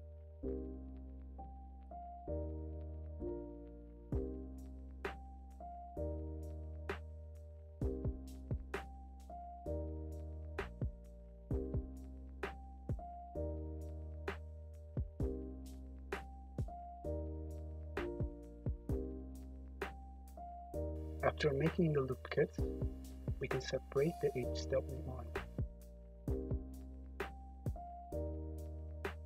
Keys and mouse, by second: 0.1 Tab, 1.5 `, 2.1 `, 3.0 `, 4.4 Tab, 4.8-7.2 typing, 7.9 middle click, 8.5 click, 8.5 `, 9.4 KP_Decimal, 10.1 middle click, 10.3-12.5 middle drag, 11.3 2, 12.5-14.3 right drag, 14.2 ctrl+r, 16.2 ctrl+r, 17.6 ctrl+r, 21.0 alt+shift+click, 23.1 shift+d, 25.1 p, 26.9 Tab, 27.7-29.2 drag, 27.9 `, 28.6 `.